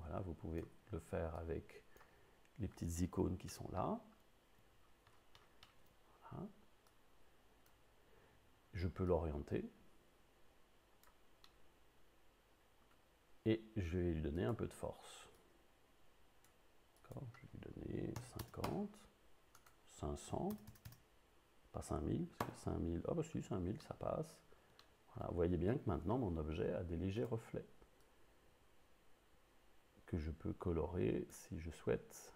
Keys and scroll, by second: 18.2 5, 18.5 0, 18.7 Return, 20.3 5, 20.6 0, 22.4 Return.